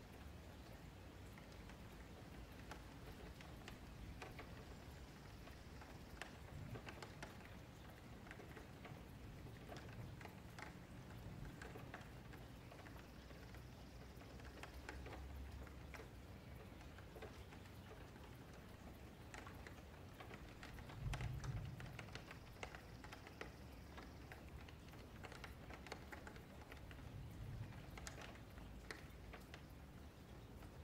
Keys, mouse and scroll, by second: 0.0 Delete, 1.2-3.1 middle drag, 3.1 Tab, 3.2-4.2 middle drag, 4.2 click, 4.9-5.3 middle drag, 5.3 g, 6.5 Delete, 6.8 middle click, 7.5 scroll up 1, 7.8 click, 8.0 Tab, 8.6-9.1 scroll up 4, 9.1 shift+middle click, 9.5 1, 9.7 click, 10.1-10.8 scroll up 5, 10.3 shift+middle click, 10.8 middle click, 11.1 scroll down 1, 11.3 shift+middle click, 11.6-12.6 scroll up 3, 12.6 click, 13.4 shift+click, 13.6 alt+shift+a, 13.9 click, 14.2 shift+click, 14.4 alt+shift+a, 14.6 click, 14.9 shift+click, 15.2 alt+shift+a, 15.3-15.6 scroll down 8, 15.6 shift+middle click, 16.0 scroll up 3, 16.2 middle click, 16.6 click, 16.9 shift+click, 17.6 j, 18.2 scroll down 1, 18.4 shift+middle click, 19.2-20.2 scroll up 4, 20.2 scroll up 1, 20.3-21.1 scroll down 4, 21.1 scroll down 1, 21.1-21.9 scroll up 1, 21.9 click, 23.0 shift+middle click, 23.7 shift+click, 25.1 click, 25.4 shift+click, 25.6 alt+shift+a, 26.0 click, 26.4 shift+click, 26.6 alt+shift+a, 27.2 scroll down 4, 27.4 shift+middle click, 27.7-29.0 scroll up 2, 29.0 z.